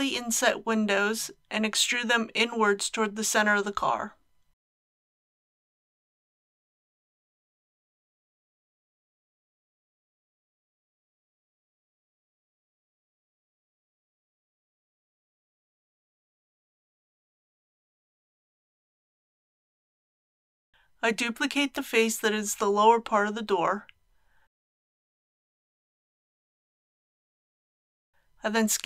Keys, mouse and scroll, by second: 0.7 shift+click, 1.3-7.7 middle drag, 9.7 alt+e, 11.4 click, 20.9 alt+a, 22.8 click, 24.0 KP_3, 25.6 shift+d, 28.3 s.